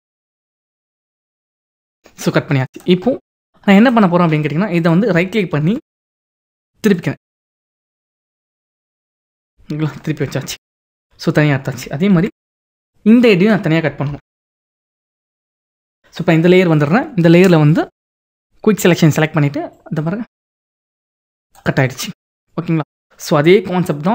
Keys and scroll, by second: 5.5 ctrl+t, 7.1 ctrl+t, 10.5 ctrl+-, 12.2 ctrl+=, 14.6 ctrl+=.